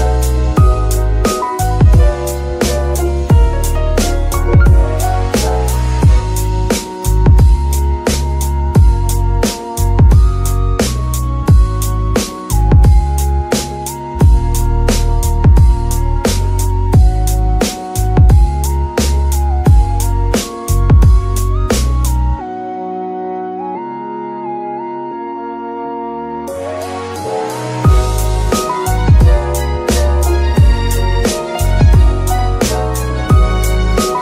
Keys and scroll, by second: 1.5 shift+Tab, 1.7 shift+s, 4.2 Tab, 5.4 Tab, 13.2 b, 16.0 shift+s, 17.6 shift+Tab, 18.3 Tab, 19.3 shift+s, 22.2 KP_3, 30.9 z.